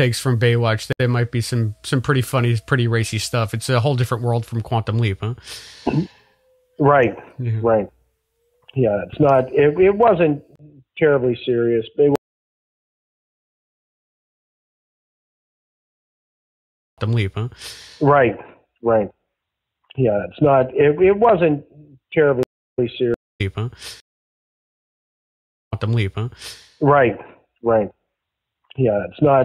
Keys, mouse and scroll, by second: 0.8 Delete, 1.9 click, 2.6 click, 3.1-4.7 drag, 5.0 click, 6.2 click, 7.3 click, 8.2 click, 9.0-10.4 drag, 10.4 Delete, 11.6 click, 12.1 space, 12.6 click, 13.8 click, 15.0-16.2 drag, 16.8 click, 16.9 space, 19.0 ctrl+s, 20.2 click, 20.7-22.3 drag, 22.3-23.9 typing, 22.6 click, 23.2 click, 25.0 ctrl+z, 25.5 click, 25.6 space.